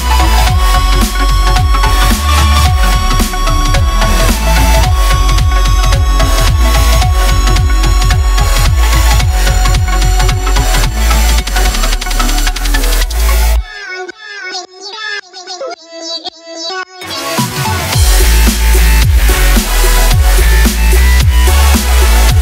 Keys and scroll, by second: 1.5 e, 3.3 ctrl+z, 3.9 ctrl+a, 11.2 a, 14.1-17.3 typing, 14.6 Tab, 18.9 Tab, 20.5 a, 20.7 Tab, 21.2 Tab, 21.8 shift+Tab.